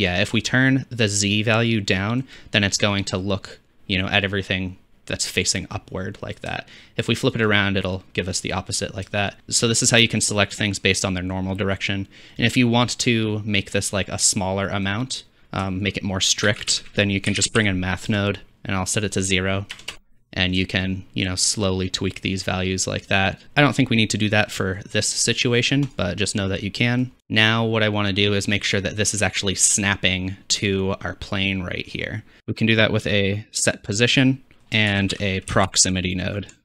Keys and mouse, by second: 2.6-6.5 middle drag, 9.4-14.4 drag, 14.7-18.0 drag, 16.5 shift+a, 21.6-23.4 shift+drag, 23.4 ctrl+x, 25.9-26.4 drag, 27.2 ctrl+s, 27.2-28.5 drag, 28.7-29.8 drag, 31.7-33.6 drag, 32.4 shift+a, 32.4 x, 34.9 shift+a.